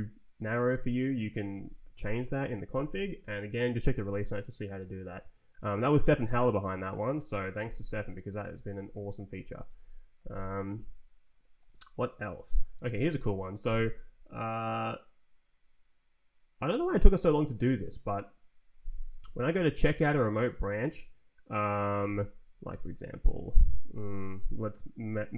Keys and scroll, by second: 8.2 ctrl+t, 8.8 Down, 9.0 Up, 9.3 d, 9.6 Return, 12.7 ctrl+t, 13.2 Left, 19.4 c, 22.0 Tab, 22.4 Down.